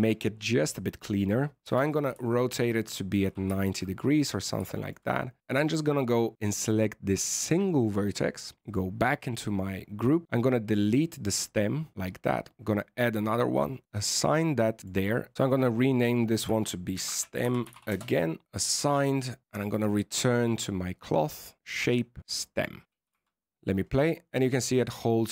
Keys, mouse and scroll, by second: 1.6 r, 3.5 shift+middle click, 3.8-4.1 scroll up 4, 4.1 middle click, 4.6 shift+middle click, 5.0-5.3 scroll up 4, 5.3 Tab, 5.4 shift+middle click, 5.5 right click, 8.6 click, 10.3 click, 11.5 click, 12.5 click, 14.0 click, 14.8 click, 14.8 click.